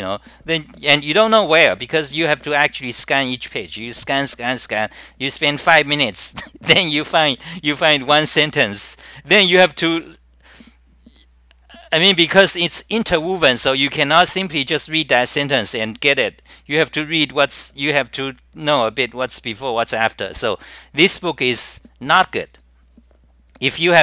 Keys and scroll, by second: 2.9 scroll down 9, 5.9 scroll down 9, 5.9 typing, 8.8 scroll down 9, 12.0 scroll down 9, 12.0 typing, 15.2 scroll down 9, 18.4 scroll down 9, 21.6 scroll down 9.